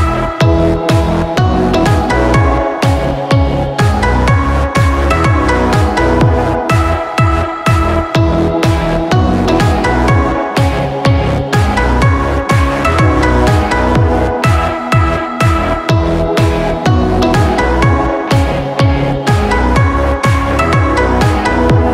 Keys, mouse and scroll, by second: 0.6-1.0 scroll down 2, 0.8 middle click, 1.0-1.7 scroll up 3, 1.3 middle click, 1.7-2.4 scroll down 9, 3.6 click, 5.1-5.5 scroll down 2, 5.8 click, 7.2 click, 8.6 click, 9.4 click, 11.3 click, 12.2 click, 14.8 click.